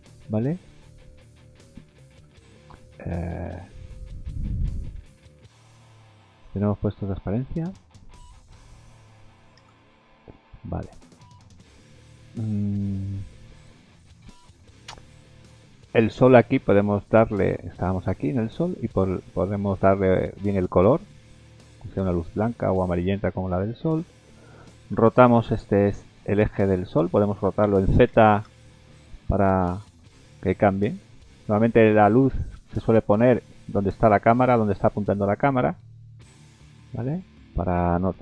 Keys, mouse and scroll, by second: 0.4 shift+middle click, 0.9 middle click, 4.7-5.1 scroll up 3, 5.1 middle click, 5.7 shift+middle click, 6.0-6.7 scroll down 12, 6.7 middle click, 7.7-8.5 scroll up 5, 8.5 middle click, 9.6 KP_0, 10.5 scroll down 4, 11.0 middle click, 11.3 scroll down 1, 11.6 middle click, 14.2 shift+middle click, 15.1 scroll down 3, 15.6 middle click, 18.0 click, 18.5 middle click, 20.5 click, 22.5 middle click, 27.6 r, 31.9 middle click, 32.3-32.7 scroll down 2, 33.3-34.6 scroll down 1, 33.3 g, 35.6 middle click, 36.3 scroll up 2, 36.6 middle click, 37.3 middle click, 37.8 r.